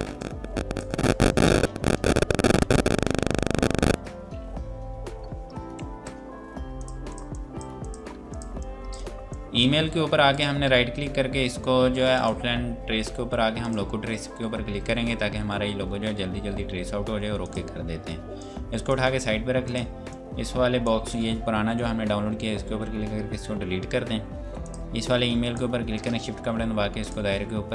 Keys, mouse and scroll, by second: 0.2 click, 5.2 scroll up 1, 5.6 F2, 5.7 click, 17.4 click, 24.3 Delete, 24.6 click, 27.0 shift+click.